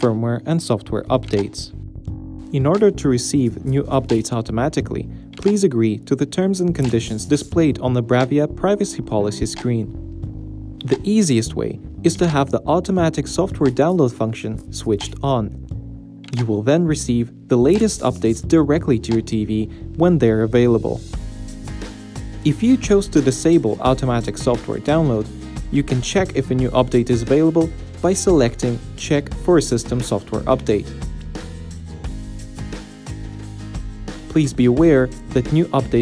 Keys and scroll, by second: 15.5 Right, 16.7 Right, 17.9 Return, 19.4 Down, 20.6 Down, 26.2 Right, 28.2 Return, 29.7 Return, 30.4 Return, 33.1 Return.